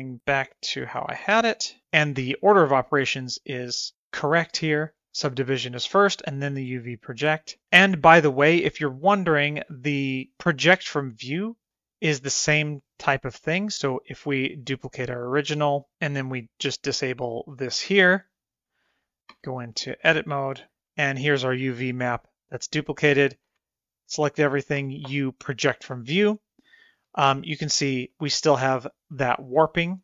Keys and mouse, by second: 0.5 middle click, 0.8 shift+middle click, 8.1 middle click, 9.0 shift+middle click, 9.2 middle click, 10.8 KP_0, 13.9 click, 14.9 click, 19.3 Tab, 23.5 a, 24.8 u, 27.2 shift+middle click, 27.5 middle click, 28.2 middle click, 29.1 middle click.